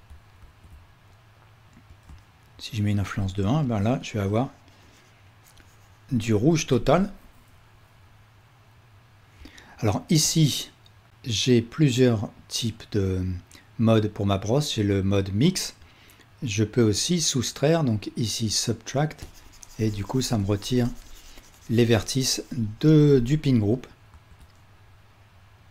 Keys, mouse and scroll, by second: 0.5 ctrl+z, 6.4 ctrl+z, 10.3-25.7 drag, 24.2 ctrl+z.